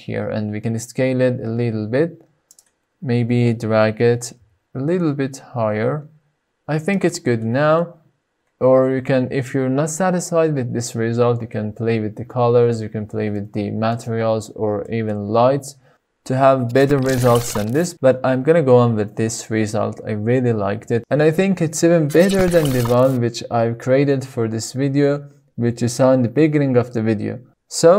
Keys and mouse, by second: 0.4 s, 1.8 click, 2.5 g, 3.7 z, 6.5 click, 11.5 middle click, 12.1-12.7 shift+middle drag, 13.5 shift+middle click.